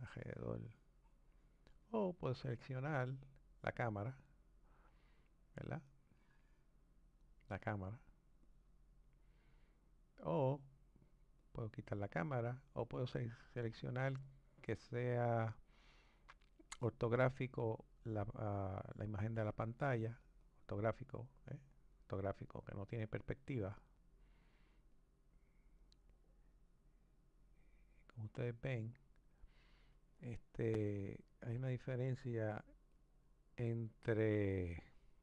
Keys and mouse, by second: 3.3 click, 5.9-8.5 drag, 11.4 click, 20.4 click, 23.9-26.9 middle drag, 30.5-35.2 drag.